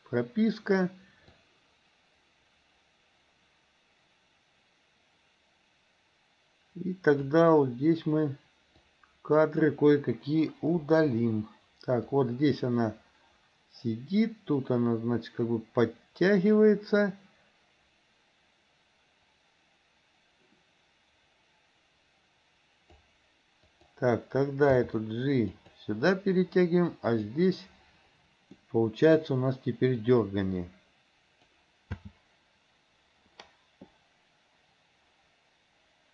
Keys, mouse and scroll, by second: 1.5-7.4 drag, 8.9-9.7 drag, 10.9 Delete, 12.2-23.1 drag, 23.7 click, 24.7 g, 27.2 click, 28.7-29.2 middle drag, 30.2-31.7 drag, 32.0 space.